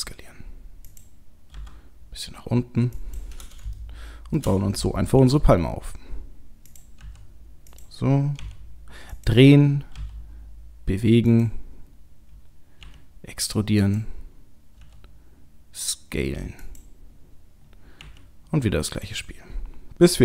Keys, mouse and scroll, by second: 1.5 g, 3.8 shift+middle click, 5.1 e, 7.0 s, 8.4 r, 10.0 g, 12.8 e, 14.8 s, 18.0 e.